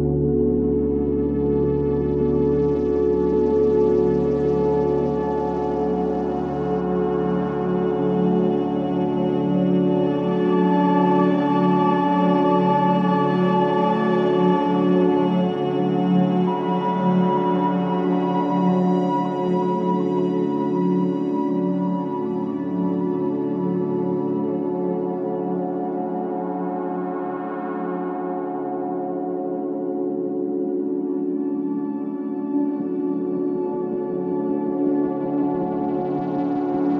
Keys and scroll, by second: 0.2 t, 4.5-10.4 typing, 11.6-12.8 typing, 16.5 Down, 16.9 Return, 17.5-19.0 typing, 26.0 ctrl+shift+KP_0, 31.6 ctrl+shift+l, 32.5 KP_0.